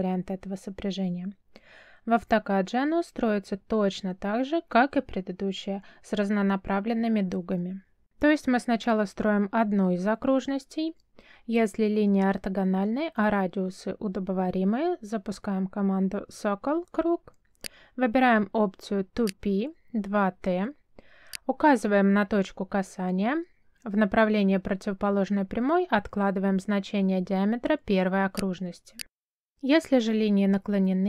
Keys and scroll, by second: 14.1 c, 14.9 space, 24.7 3, 26.2 Return.